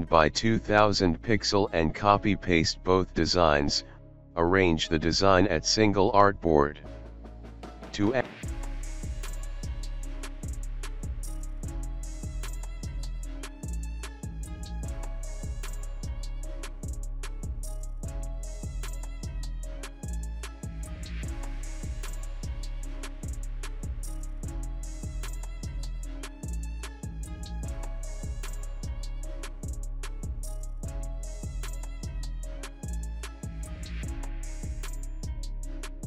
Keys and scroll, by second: 0.1 ctrl+a, 0.4 ctrl+v, 5.7 alt+space, 7.0 ctrl+z, 8.1 ctrl+g, 8.9 ctrl+g, 9.5 ctrl+z, 12.9 alt+shift+space, 16.0 alt+space, 17.5 ctrl+g, 21.1 space, 29.9 alt+space, 30.7 alt+space.